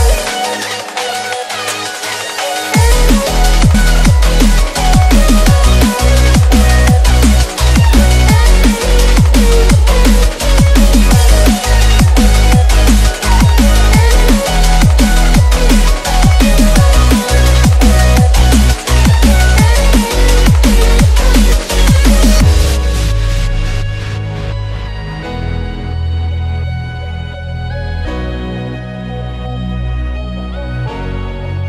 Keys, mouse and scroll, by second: 1.2 shift+click, 3.5 click, 4.1 shift+click, 4.8 BackSpace, 5.7-6.3 click, 6.5 BackSpace, 7.0-7.7 click, 7.7 BackSpace, 7.9 space, 8.0 click, 8.1 space, 9.0 click, 9.2 space, 9.8-12.2 drag, 12.4 BackSpace, 13.1 ctrl+-, 13.5-15.2 typing, 13.6 click, 14.0 click, 14.5 ctrl+=, 15.0 click, 15.7-16.6 click, 16.8 BackSpace, 17.0 space, 17.1 click, 17.3 space, 17.8-18.9 click, 19.1 BackSpace, 19.7 ctrl+-, 20.2 space, 20.3 click, 20.5 space, 20.7 click, 20.7-21.8 space, 22.4 ctrl+-, 22.6-23.3 click, 23.3 space, 23.4 click, 28.4 ctrl+click, 29.3 click.